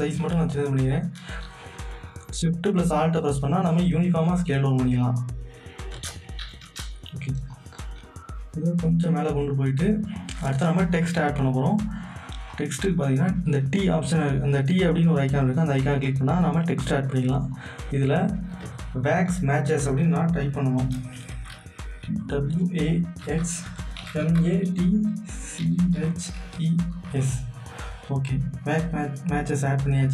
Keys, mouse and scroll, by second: 6.6 Return, 7.5-10.1 drag, 12.5 click, 17.5 click, 17.6 click, 21.3-27.1 typing, 28.9 click.